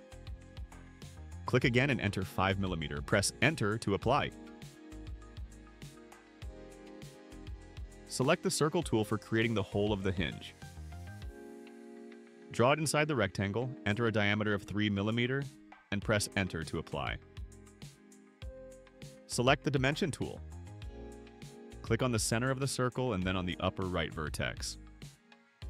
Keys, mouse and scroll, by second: 2.2 click, 3.6 5, 5.3 Return, 11.0 click, 11.7 middle click, 11.7-12.3 scroll up 3, 12.0 middle click, 12.3 middle click, 13.1 click, 14.6 3, 15.6 Return, 21.0 click, 22.7 click, 23.8 click, 24.4 click.